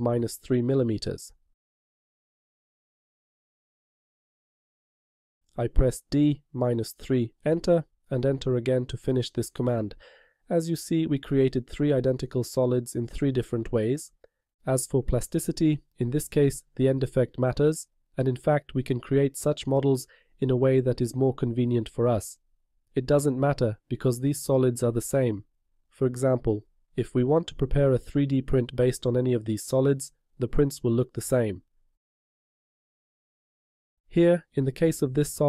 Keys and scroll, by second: 6.2 d, 7.0 -, 7.6 3.